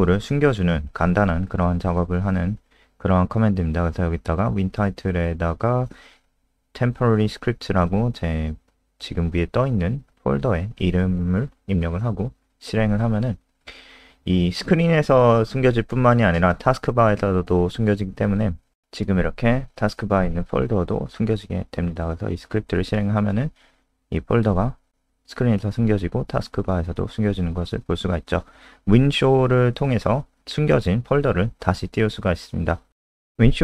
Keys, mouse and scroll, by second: 1.4 ctrl+Right, 1.8 ctrl+Left, 2.3 ctrl+shift+Right, 2.6 BackSpace, 2.8 BackSpace, 4.5-10.2 typing, 10.0 shift+End, 10.4 ctrl+s, 14.5 click, 21.9 F5, 26.1 click, 27.0 Home, 27.2 ctrl+shift+Right, 27.3-28.5 typing, 28.9 F5, 31.8 click, 32.4 Return.